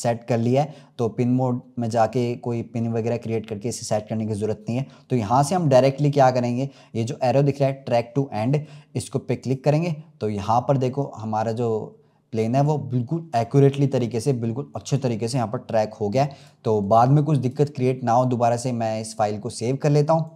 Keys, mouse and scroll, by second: 14.5-15.1 scroll down 2, 16.3-20.3 drag.